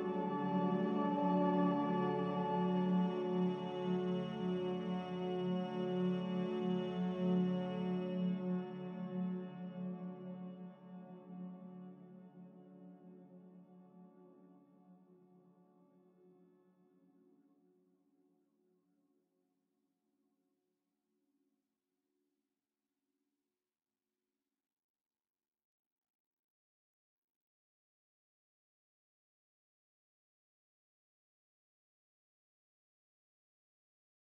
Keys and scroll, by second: 2.1 5, 5.6 5, 5.8 Return, 10.2 z, 11.9 Escape, 15.5 5, 15.6 0, 15.9 Return, 24.0 g, 27.8 z, 29.5 Escape, 29.7 Escape.